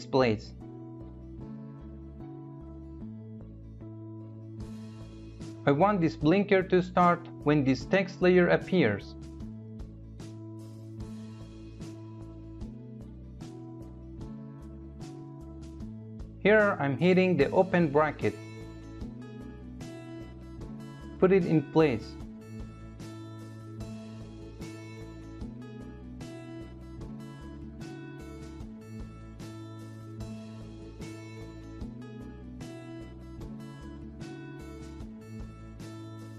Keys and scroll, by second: 16.3 [.